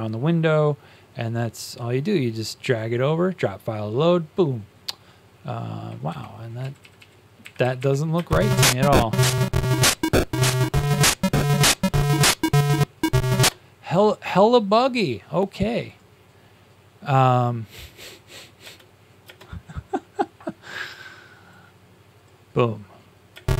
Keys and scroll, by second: 6.0 Tab, 6.5 Down, 6.9 Down, 7.7 Up.